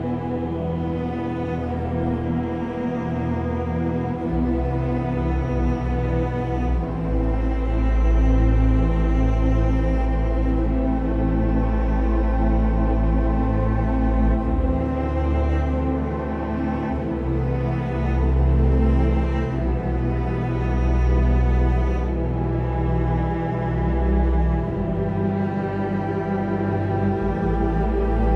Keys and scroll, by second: 7.4 b, 9.1 b, 12.4-13.7 typing, 12.9 ctrl+z, 15.0 ctrl+z.